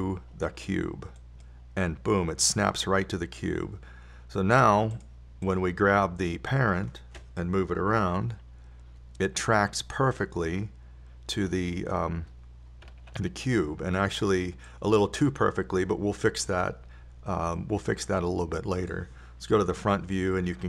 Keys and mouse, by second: 0.2-2.2 drag, 6.4-9.6 drag, 9.6 g, 16.1-17.8 drag, 19.0-20.6 drag.